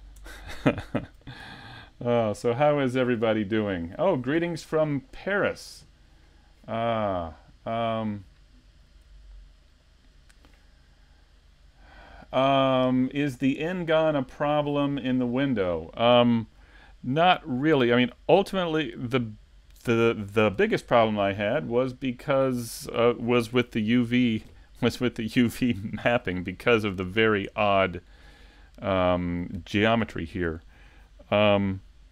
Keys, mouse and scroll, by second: 0.2 Tab.